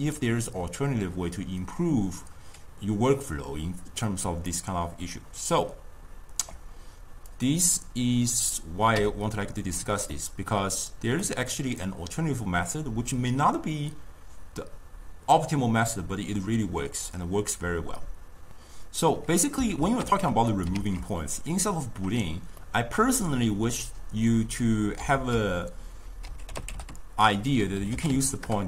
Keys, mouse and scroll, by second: 4.3 d, 4.6-6.5 right drag, 6.5 d, 7.4 click, 9.1 m, 10.2-11.3 middle drag, 11.3-14.4 drag, 19.2-20.1 drag, 20.1 ctrl+x, 20.6 click, 20.8 ctrl+x, 22.6-25.2 middle drag, 25.2 ctrl+a.